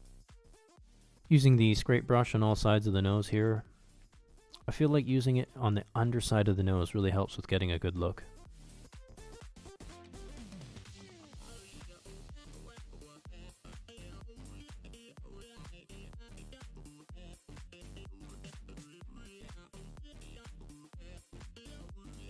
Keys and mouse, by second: 0.2 s, 0.3 click, 1.1 middle click, 1.5 s, 1.5 click, 2.3 shift+click, 2.5 middle click, 2.7 middle click, 3.0 s, 3.0 click, 3.4 click, 3.7 click, 3.8 click, 4.0 click, 4.3 middle click, 4.4 middle click, 4.6 ctrl+middle click, 4.8 f, 5.0 shift+c, 5.3 ctrl+click, 5.5 ctrl+click, 5.8 ctrl+click, 6.3 middle click, 6.5 f, 6.7 ctrl+middle click, 7.0-8.6 drag, 7.0 c, 8.8 middle click, 9.7 click, 10.3 middle click, 10.5 middle click, 10.6 middle click, 11.0 middle click, 11.3 shift+click, 11.6 shift+click, 11.8 shift+click, 12.2 f, 12.3 s, 12.3 click, 13.2 shift+click, 13.3 middle click, 13.4 shift+c, 13.5 ctrl+click, 14.7 middle click, 14.9 middle click, 15.4 middle click, 15.7 click, 15.7 s, 16.5 middle click, 17.2 ctrl+click, 17.5 click, 17.6 shift+middle click, 17.8 ctrl+z, 18.0 f, 18.3 s, 18.3 click, 18.5 click, 18.8 s, 18.9 click, 19.0 click, 19.2 click, 19.5 click, 19.6 middle click, 19.8 middle click, 19.9 click, 20.0 f, 20.2 f, 20.4 click, 20.6 click, 20.9 click, 21.4 shift+click, 21.7 shift+click, 22.1 middle click.